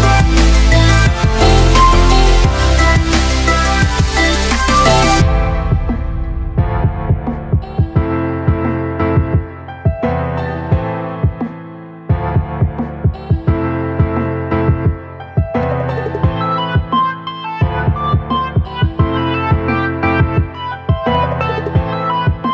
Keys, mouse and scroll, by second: 1.6-9.0 shift+drag, 9.0 space, 9.2 click, 9.5 space, 10.4 shift+click.